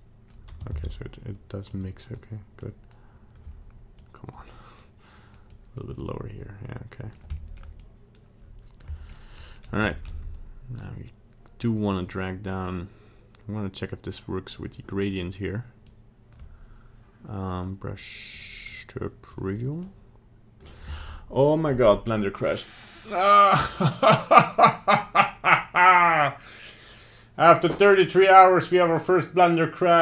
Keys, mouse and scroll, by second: 0.8 ctrl+z, 1.7 click, 2.6 click, 3.9 click, 4.8 click, 5.5 click, 6.0 click, 7.3 middle click, 7.8 click, 9.1 middle click, 9.3 middle click, 9.9 shift+middle click, 10.0 shift+middle click, 10.8 click, 14.5 click, 15.8 click, 17.5 click, 18.7 click, 19.8 click.